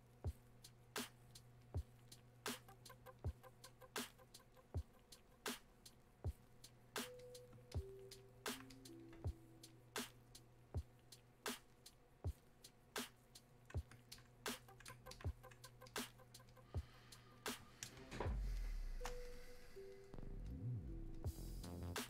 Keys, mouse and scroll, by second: 18.0 space, 18.4 click, 18.7 space, 19.2-22.0 drag.